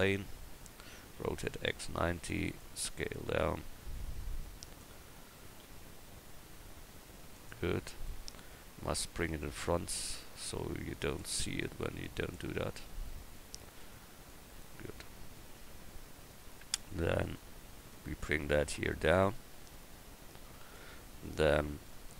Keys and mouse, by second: 1.2 r, 3.1 s, 5.6 s, 8.7 Tab, 9.3 Tab, 15.6 KP_1, 16.8 Tab.